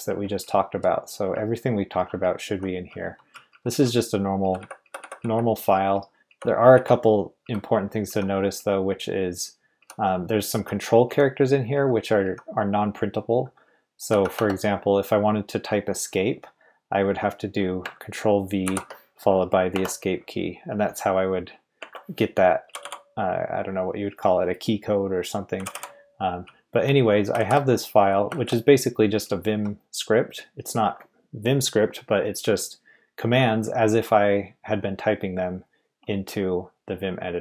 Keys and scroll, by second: 0.0-8.6 typing, 9.8-12.2 typing, 14.1-14.8 typing, 18.6 ctrl+v, 19.7 Escape, 21.8 Escape, 22.6 typing, 25.5-29.6 typing.